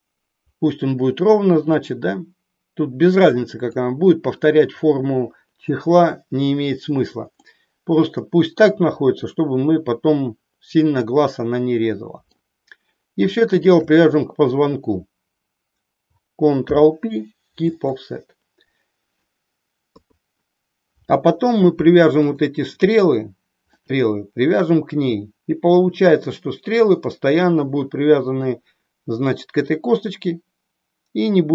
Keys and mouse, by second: 1.7-3.8 drag, 7.4-12.4 middle drag, 13.5 shift+click, 16.7 ctrl+p, 19.9 KP_3, 22.2 click, 23.8 middle click.